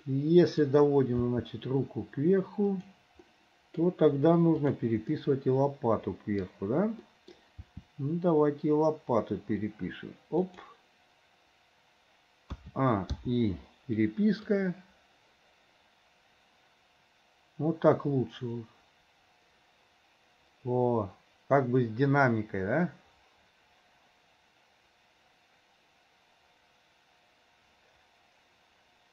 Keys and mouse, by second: 0.1 middle click, 1.3 r, 3.4 middle click, 4.6 click, 5.2-6.4 middle drag, 7.1 click, 7.3 middle click, 8.0 r, 12.6 a, 14.6-16.5 drag, 25.8-29.1 drag.